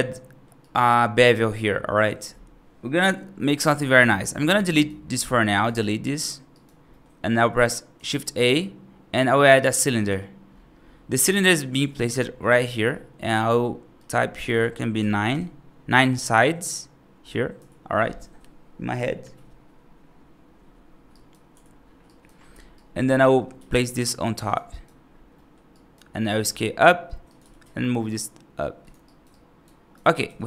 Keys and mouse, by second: 0.0-0.3 middle drag, 0.5 right drag, 3.5 right drag, 3.9 middle drag, 4.6 right drag, 5.0 x, 6.4 right click, 6.8 middle click, 8.1 shift+a, 12.0 middle drag, 13.8-15.2 drag, 21.0 right click, 21.9 right drag, 22.6-22.9 right drag, 23.1 middle drag, 23.4 g, 24.6 right drag, 25.2 middle drag, 25.6 right drag, 26.3 s, 27.3 g, 28.9 right drag, 29.2-29.8 right drag, 30.1 g.